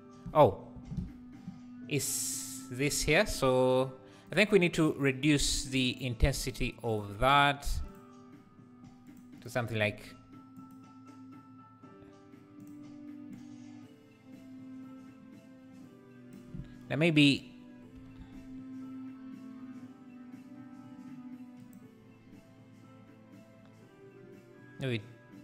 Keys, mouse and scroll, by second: 0.9 ctrl+z, 4.3 click, 6.4 click, 7.9 click, 10.5 click, 13.3 click, 17.9 g.